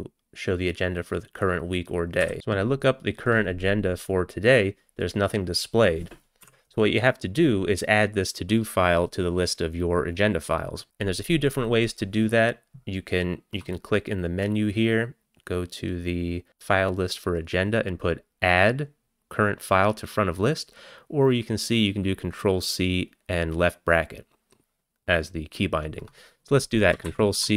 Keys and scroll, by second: 2.3 typing, 6.5 q, 27.1 ctrl+c.